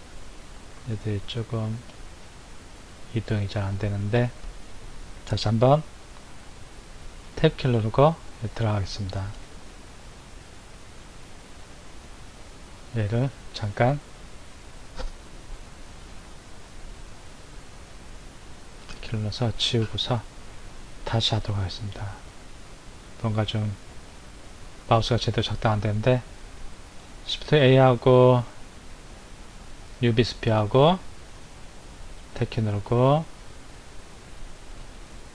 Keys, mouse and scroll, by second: 7.1 Tab, 8.1-14.8 middle drag, 18.6 Tab, 19.9 Delete, 21.4-24.4 shift+middle drag, 27.0 shift+a, 32.0 Tab, 33.4 click, 34.7 shift+click.